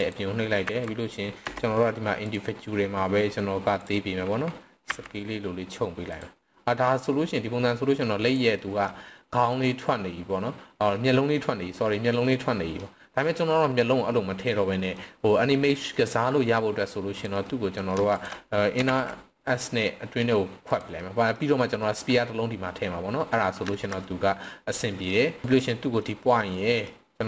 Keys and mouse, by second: 0.0 click, 0.6 s, 1.4 Escape, 2.1-3.9 drag, 4.9 s, 6.1 click, 6.5-7.0 middle drag, 7.7-8.0 middle drag, 8.2 click, 8.6 middle drag, 9.5-10.9 middle drag, 11.1-11.7 middle drag, 12.2-12.8 middle drag, 13.2 middle drag, 14.8 middle click, 17.1 click, 17.4 middle click, 18.2 shift+click, 18.9 alt+s, 20.7 click, 21.0 middle click, 21.8 middle click, 22.8 middle click, 23.8 shift+middle click, 24.0 middle click, 24.9-25.4 middle drag, 25.4 x, 25.6-26.0 middle drag, 26.5 middle drag.